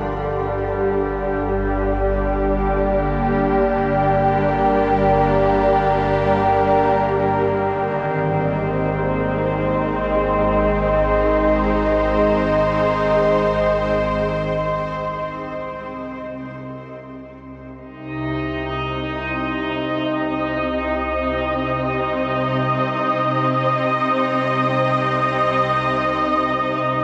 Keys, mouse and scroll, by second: 0.0 space, 0.2 click, 0.4 click, 2.4 right click, 3.2 click, 8.9-10.8 alt+drag, 10.8 right click, 11.4 click, 13.6 right click, 14.2 click, 17.9-21.4 drag, 21.6 right click, 21.7 right click, 22.4 click, 22.8 click, 26.4 right click.